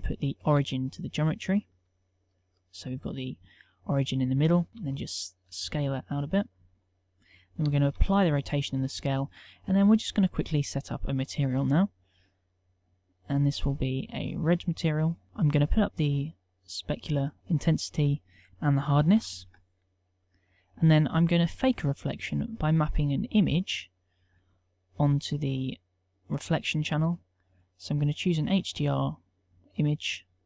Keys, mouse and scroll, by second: 4.7 z, 4.7 s, 7.7 ctrl+a.